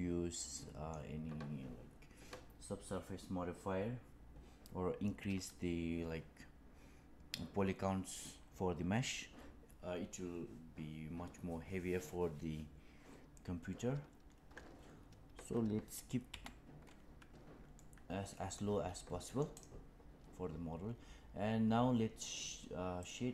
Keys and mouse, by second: 0.3-0.8 middle drag, 16.2 n, 17.9-18.5 middle drag, 19.5 click.